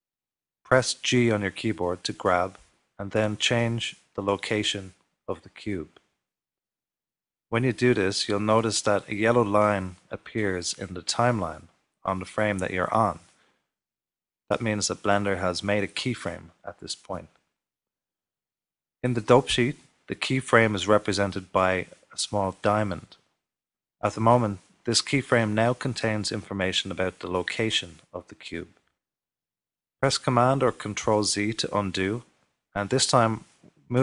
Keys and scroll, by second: 31.4 super+z, 31.9 super+z.